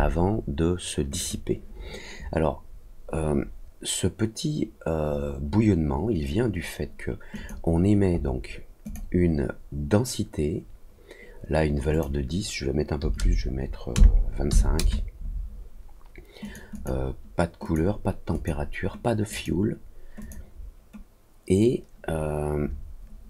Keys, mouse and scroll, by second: 1.1 click, 3.7 middle click, 4.5 middle click, 5.1 scroll down 2, 5.6 scroll down 2, 7.3 click, 8.1 scroll up 2, 8.8 click, 11.9 click, 16.4 click, 16.7 click, 17.6 click, 18.3 click, 19.2 click, 20.1 click.